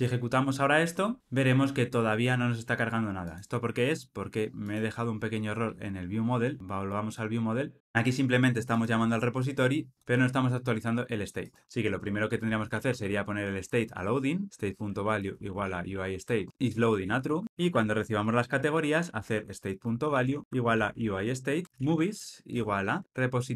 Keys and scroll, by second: 0.0 ctrl+r, 7.2 super+b, 13.7 Return, 19.8 Return, 21.6 Delete.